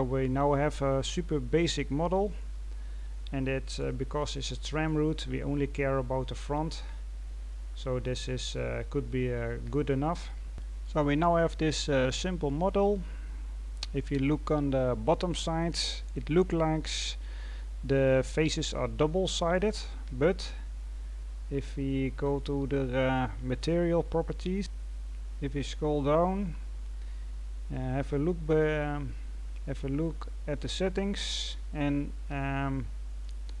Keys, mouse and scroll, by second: 25.2-29.3 scroll down 2.